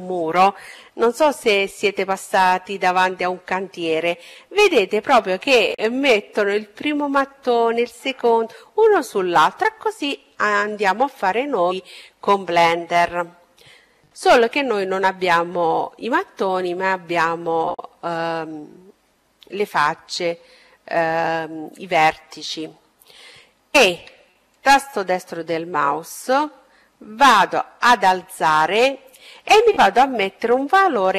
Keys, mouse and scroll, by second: 12.8-14.8 middle drag, 22.0 e, 24.1-26.1 drag, 28.6-30.6 drag.